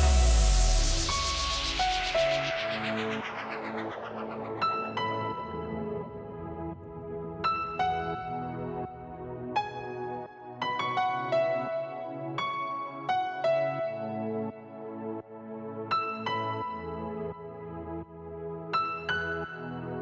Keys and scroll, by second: 0.0-2.1 typing, 3.1 space, 4.2 space, 4.8 space, 5.5 space, 6.5 space, 7.6 space, 8.0 space, 10.0 space, 13.3-14.1 typing, 15.1 -.